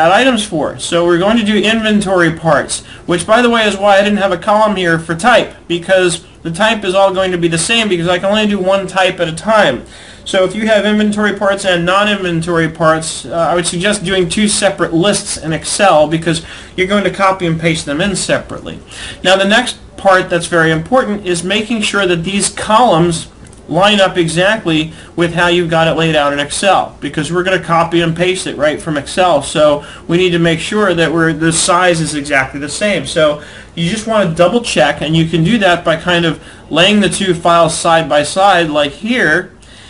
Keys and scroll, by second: 3.0 alt+Tab, 6.9 alt+Tab, 13.9 alt+Tab.